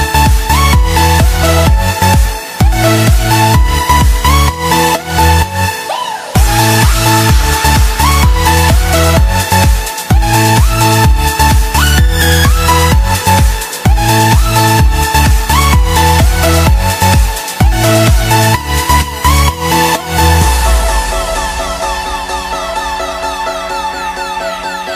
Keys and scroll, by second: 0.4 space, 21.0 space.